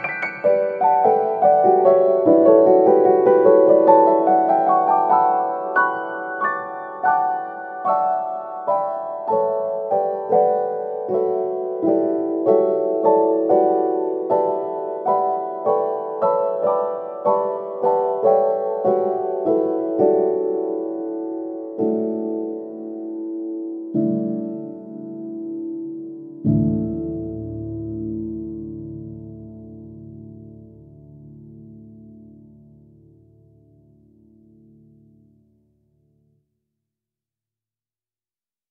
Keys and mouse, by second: 0.0 shift+middle click, 0.6 middle click, 1.4 middle click, 4.5 ctrl+b, 6.1 middle click, 6.8 ctrl+z, 7.4 middle click, 8.4 shift+b, 10.6 middle click, 11.2 shift+middle click, 11.7 shift+middle click, 13.0 middle click, 14.2 right click, 15.5 shift+right click, 18.3 shift+middle click, 18.8 middle click, 19.4-21.2 middle drag, 21.4-22.4 middle drag, 22.8 middle click, 24.3 e, 27.1 middle click, 28.6 alt+right click, 29.0 g, 30.0 g, 31.9 right click, 32.9 shift+right click, 33.3 shift+right click, 33.7 g, 35.7 alt+right click, 36.2 f, 36.9 shift+middle click.